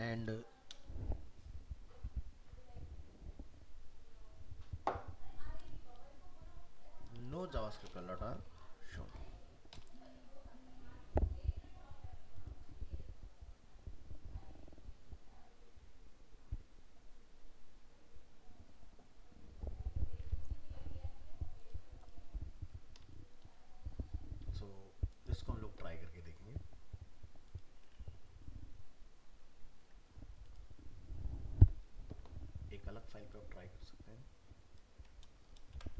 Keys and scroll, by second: 8.6 ctrl+s, 35.5 ctrl+c.